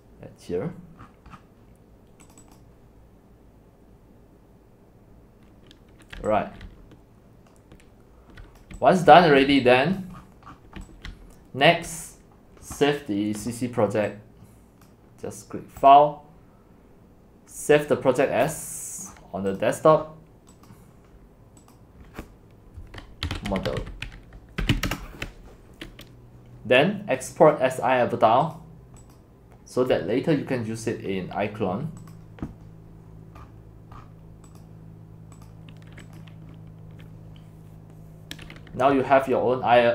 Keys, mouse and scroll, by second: 0.0 click, 1.0-2.3 scroll down 15, 2.3-6.2 drag, 5.9-9.5 typing, 9.4 click, 10.0 click, 10.2-10.6 scroll down 9, 10.6 middle click, 10.6 scroll, 11.1-12.2 typing, 12.0-14.2 drag, 19.1 scroll, 20.0-20.5 scroll, 20.7 click, 23.0-25.2 typing, 29.1 click, 32.0 click, 33.4-34.4 scroll, 35.5 click, 36.4 click.